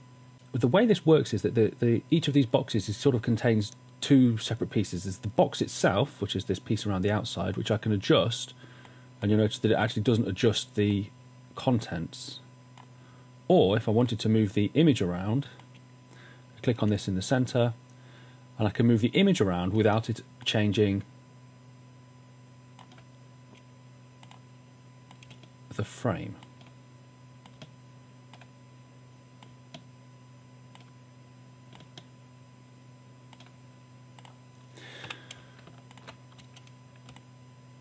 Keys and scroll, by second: 35.1 w, 35.4 space, 37.4 space.